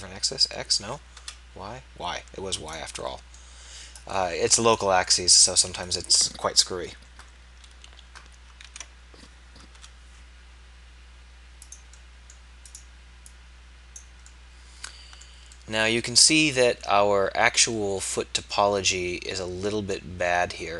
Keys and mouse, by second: 3.2-5.9 middle drag, 5.9-7.9 right drag, 8.7 ctrl+a, 12.7-14.0 drag, 14.0-16.1 middle drag.